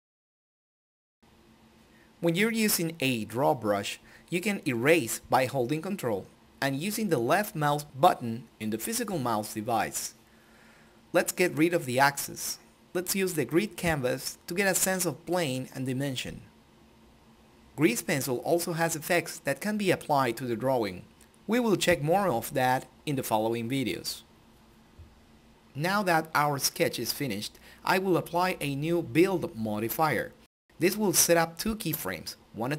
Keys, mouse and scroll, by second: 2.0-9.7 ctrl+drag, 10.2-18.2 drag, 18.5 click, 24.2 click, 32.5 click.